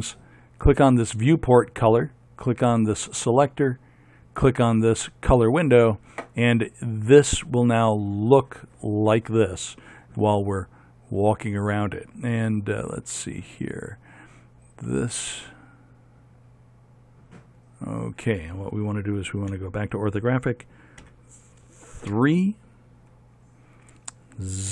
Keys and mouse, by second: 13.9-15.4 right drag, 15.4-16.9 middle drag, 19.7 KP_5, 21.2 KP_2, 22.3 KP_3.